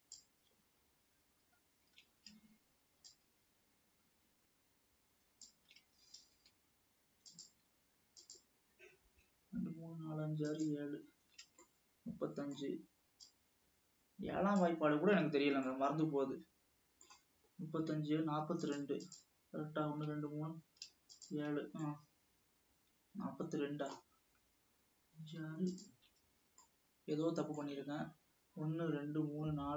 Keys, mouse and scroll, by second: 3.2 shift+click, 7.4 shift+drag, 8.4 shift+click, 10.6 shift+click, 11.9-13.4 middle drag, 13.4 shift+click, 15.9-18.8 middle drag, 18.8 shift+click, 19.7 shift+click, 21.3 shift+click, 22.0-25.0 middle drag, 25.7 shift+click, 26.7 scroll down 1, 26.8-28.0 middle drag, 28.0 scroll up 1.